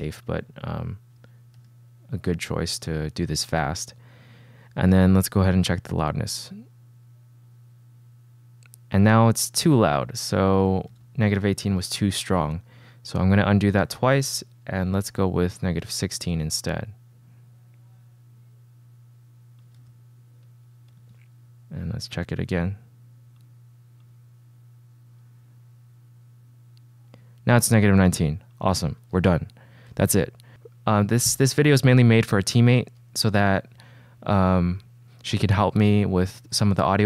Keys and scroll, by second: 1.7 c, 5.1 shift+w, 11.1 super+z, 11.9 super+z, 12.5 d, 15.0-16.5 typing, 19.9 c, 21.1 shift+w, 29.2 super+s.